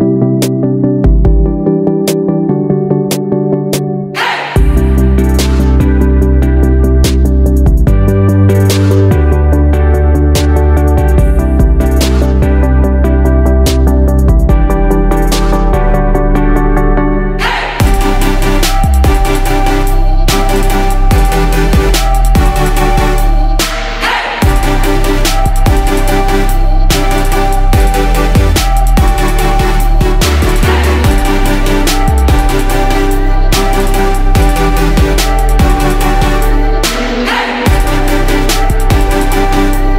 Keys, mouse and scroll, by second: 21.6-24.3 drag, 25.6 right click, 26.5-39.9 drag.